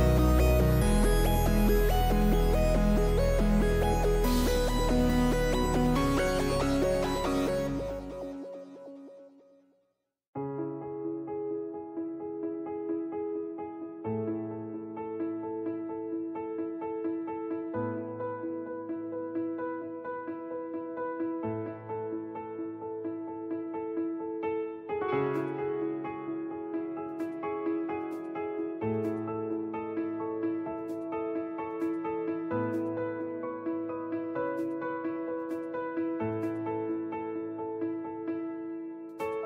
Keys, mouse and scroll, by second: 1.0 b, 8.6-10.4 drag, 11.7-13.5 drag, 14.7-16.7 drag, 20.9 alt+a, 28.7 alt+a, 29.7-31.3 drag, 35.1 click, 38.8 n.